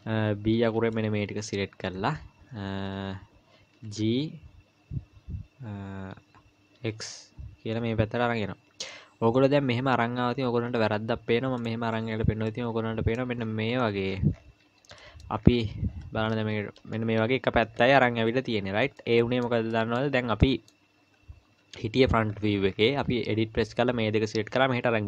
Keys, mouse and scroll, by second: 1.2 b, 1.8 scroll down 2, 3.7 g, 12.5 middle click, 13.4-13.8 scroll down 3, 14.1-15.0 scroll down 11, 14.6 Tab, 15.0 middle click, 15.3-16.3 scroll up 4, 16.3 KP_7, 16.9-17.5 scroll down 3, 19.0 middle click, 19.7-20.5 scroll up 3, 20.0 middle click, 20.4 middle click, 21.6 KP_1, 22.3-23.2 scroll up 8, 23.1 Tab.